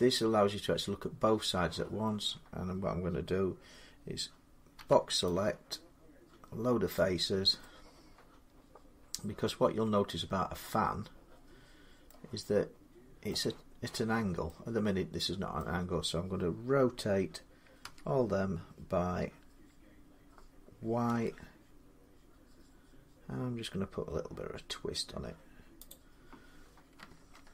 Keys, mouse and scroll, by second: 4.6 click, 4.6 b, 6.7-11.8 drag, 11.9 middle click, 15.4 middle click, 17.6 r, 20.9 y, 25.7-27.2 drag, 27.2 ctrl+z.